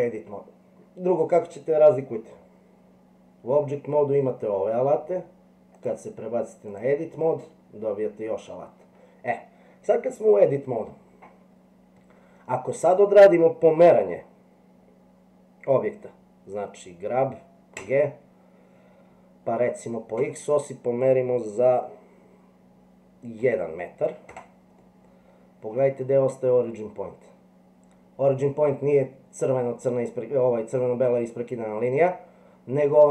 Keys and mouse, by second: 5.8-6.8 drag, 17.8 g, 24.8 middle click.